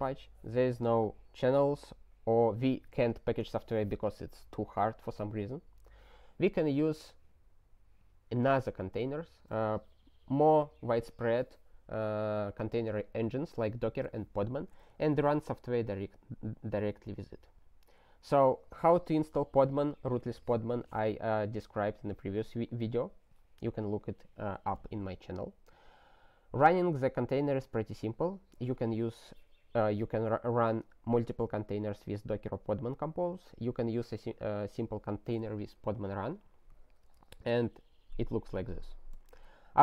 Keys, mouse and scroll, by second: 2.3 ctrl+s, 15.1 ctrl+n, 15.3 ctrl+n, 37.0 ctrl+space, 37.1 ctrl+n, 37.3 ctrl+n, 37.6 ctrl+e, 39.1 ctrl+g.